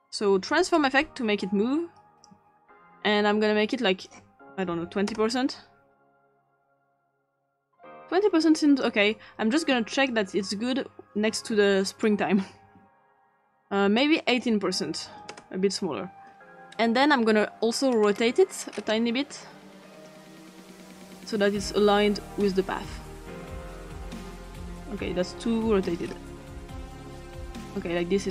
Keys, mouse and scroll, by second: 0.0 click, 0.7-2.3 drag, 3.7 click, 4.5-5.4 typing, 7.0-8.9 drag, 9.9 click, 11.9 click, 14.0 click, 14.6-15.5 typing, 17.9-19.9 scroll up 2, 19.9 click, 22.2-24.8 drag, 26.0-26.7 scroll down 2, 26.7-28.0 scroll down 1, 28.0-28.3 scroll down 1.